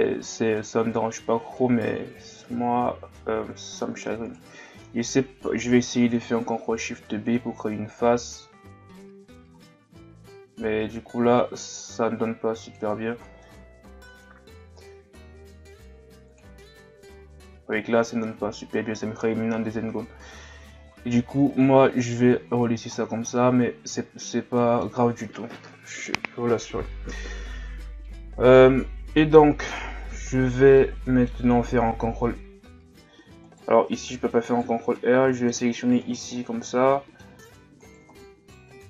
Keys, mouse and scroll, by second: 0.3-3.6 middle drag, 3.6-3.9 scroll up 1, 4.3 right click, 6.0 ctrl+shift+b, 13.2 scroll down 1, 13.4-14.8 middle drag, 14.8 Tab, 16.3 click, 19.6 ctrl+z, 20.5 ctrl+z, 22.4 Tab, 23.0-23.3 scroll down 3, 23.3-26.5 middle drag, 28.0-28.8 middle drag, 28.8-29.2 scroll down 2, 29.2 middle click, 29.4-29.8 scroll up 1, 29.8 Tab, 30.8-31.9 middle drag, 31.9 ctrl+r, 34.5 alt+right click, 35.0-36.0 middle drag, 36.0 alt+shift+right click, 36.3-37.9 middle drag, 37.9 alt+shift+right click, 38.1 scroll up 1, 38.2-38.8 middle drag.